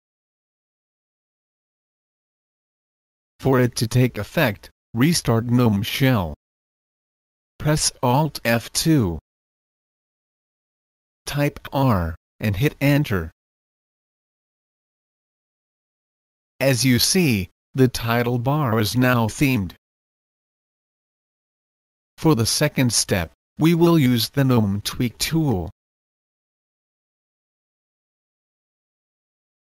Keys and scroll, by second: 0.2 Return, 8.0 alt+F2, 12.8-13.5 typing, 13.5 Return, 27.3 Return, 27.3 typing.